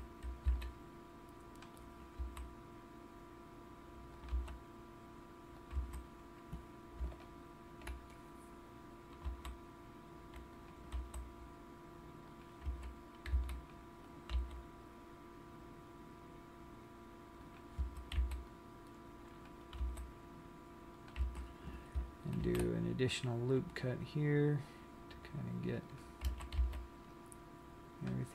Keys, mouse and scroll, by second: 0.1 a, 0.9 c, 2.2 right click, 2.8 s, 4.6 click, 4.6 g, 6.0 click, 6.3 a, 7.7 alt+click, 9.6 s, 11.0 click, 11.4 g, 12.7 click, 12.9 a, 13.7 c, 14.8 right click, 15.1 g, 18.0 click, 18.2 a, 18.7 c, 20.3 g, 21.6 click, 21.6 a, 22.8 ctrl+r, 26.4 click, 27.0 a, 27.2 c.